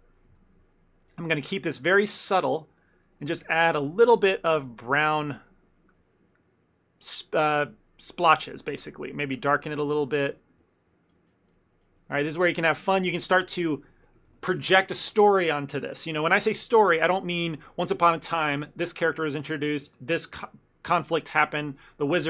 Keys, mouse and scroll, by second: 0.4 shift+f, 1.5 f, 2.5 click, 2.9-3.6 click, 3.3 click, 3.5 click, 3.7 click, 4.0 shift+middle click, 4.2 ctrl+middle click, 4.6 click, 4.8 click, 5.2 click, 5.3 click, 5.7 click, 7.2 click, 10.0 click, 10.4 click, 10.6 click, 11.6 click, 12.5 click, 12.7 click, 12.9 click.